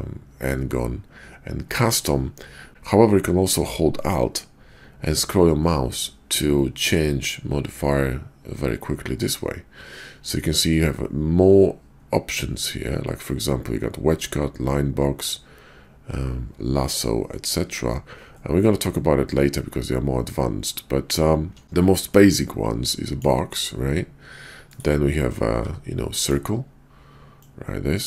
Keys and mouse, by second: 24.8-25.5 middle drag, 25.5 d, 27.4-28.0 drag.